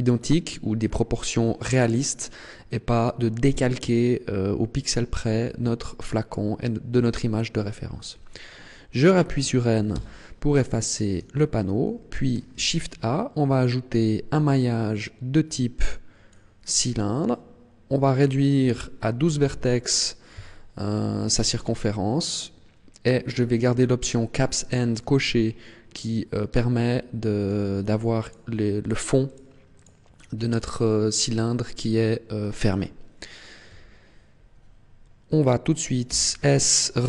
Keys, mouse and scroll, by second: 9.9 n, 10.5-11.3 scroll down 1, 11.3 shift+middle click, 12.5 shift+a, 18.2 click, 24.5 middle click, 26.7 middle click, 28.1 click, 28.8 click, 29.3 click, 29.7 click, 32.3 scroll down 1, 33.7 KP_1, 36.1 s.